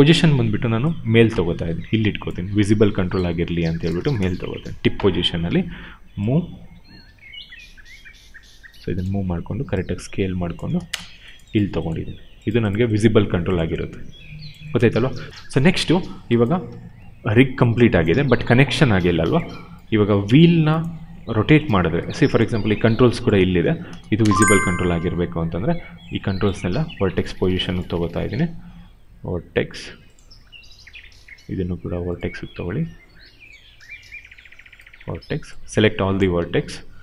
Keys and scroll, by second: 0.3 w, 2.3 r, 3.8 space, 5.5 w, 9.0 r, 10.5 space, 16.5 w, 18.0 ctrl+z, 18.8 q, 23.9 space, 24.9 q, 28.2 ctrl+z, 36.5 r.